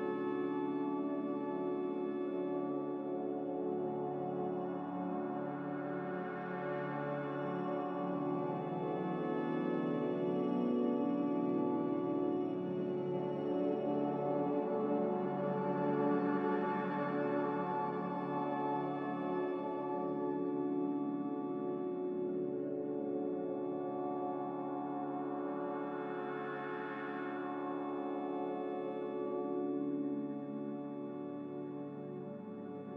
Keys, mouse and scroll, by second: 2.8 v, 3.8 b, 6.3-7.2 typing, 8.4 typing, 10.1-11.0 typing.